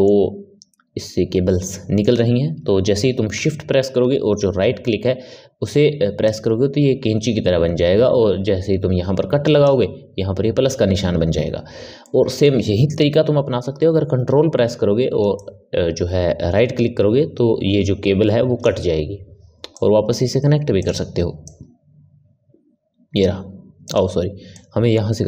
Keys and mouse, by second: 6.1 shift+right click, 11.9-14.9 middle drag, 15.3 ctrl+right click, 19.6-21.4 drag, 24.5 click.